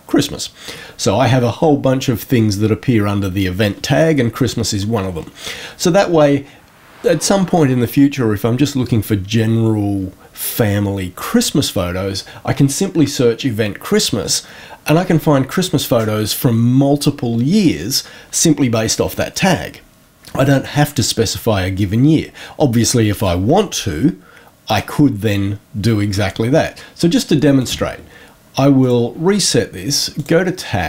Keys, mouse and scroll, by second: 27.5 click, 28.7 click, 30.1 click.